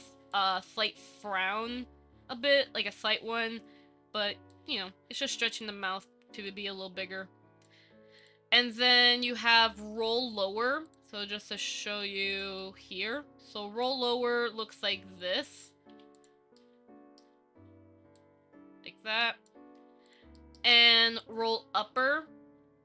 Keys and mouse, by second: 0.5 click, 4.8-5.8 drag, 6.6-7.8 drag, 8.4 click, 11.4-12.0 middle drag, 12.8 shift+middle drag, 14.0-15.4 drag, 16.8-17.4 middle drag, 18.4-19.7 drag, 20.5 middle click, 22.3-22.8 drag.